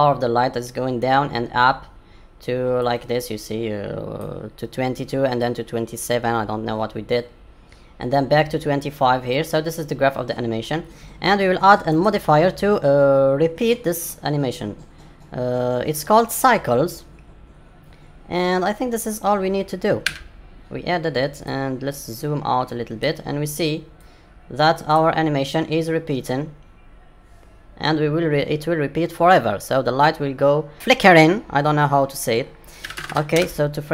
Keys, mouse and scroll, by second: 2.8 click, 31.0 click, 33.2 KP_0.